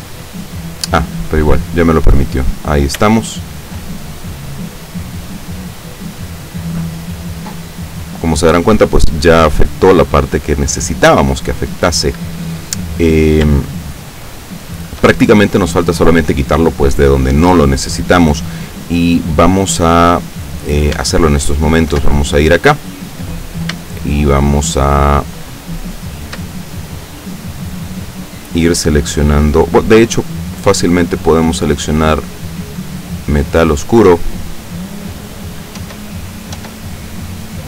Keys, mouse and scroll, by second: 2.5 scroll down 1, 3.3-4.0 shift+middle drag, 4.4 scroll up 1, 5.1-5.4 scroll down 2, 5.8 scroll up 2, 6.8 scroll down 2, 7.3-11.0 scroll down 2, 13.7-15.2 shift+middle drag, 21.1 Tab, 21.6 right click, 22.1 Tab, 22.9 scroll up 1, 23.9-26.5 shift+middle drag, 30.7 click, 31.8-32.2 scroll up 1, 32.9 click, 35.8 Tab, 36.6 Tab.